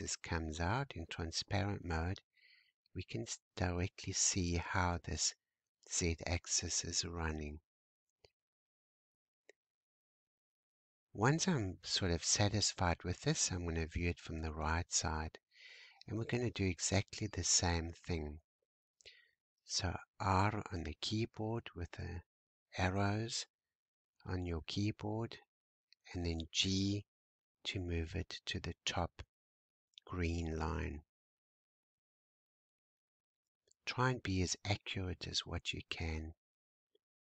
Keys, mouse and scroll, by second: 0.3 scroll up 1, 0.5 click, 1.1-1.8 scroll down 2, 1.8-4.9 shift+middle drag, 7.1 click, 8.1-11.1 scroll up 1, 12.1 `, 15.2-18.1 shift+middle drag, 18.1 r, 25.9 g, 30.0 shift+middle click, 30.8-31.1 shift+scroll down 1, 31.1-31.5 scroll up 5, 32.0-32.3 scroll up 2, 32.5-33.9 scroll up 3, 35.1 g.